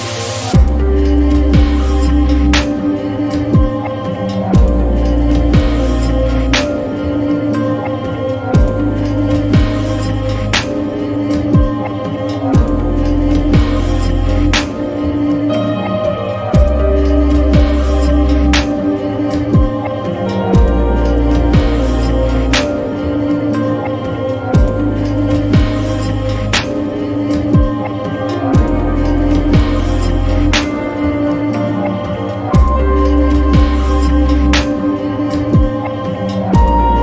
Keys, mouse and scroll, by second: 4.5-5.3 drag, 7.4 click, 9.5 click, 9.9 click, 15.0 click, 25.3 click, 27.5 click, 28.1-31.3 middle drag, 35.5 click, 36.9 Delete.